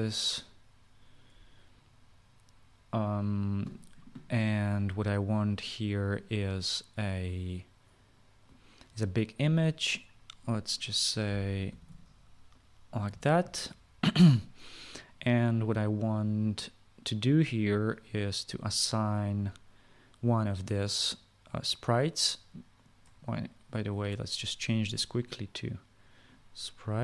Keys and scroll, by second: 11.9-14.2 typing.